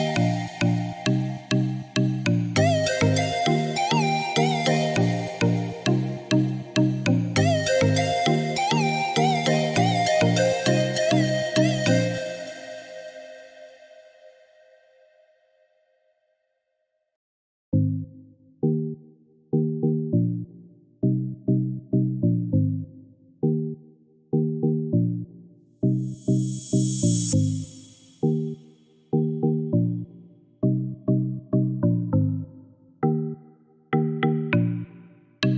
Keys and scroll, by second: 12.2 2, 12.5 5, 12.7 Return, 16.6 2, 16.9 5, 17.0 Return, 32.8 3, 33.2 Return.